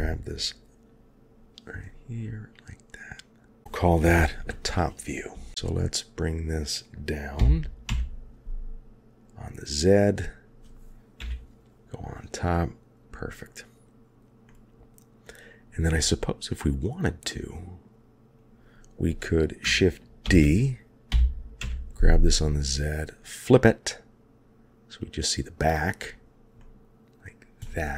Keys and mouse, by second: 5.6-6.2 middle drag, 7.4 g, 11.2 KP_7, 14.4 middle click, 16.0-17.8 middle drag, 20.2 shift+d, 25.0 click, 26.6-27.2 middle drag, 27.6-27.9 middle drag.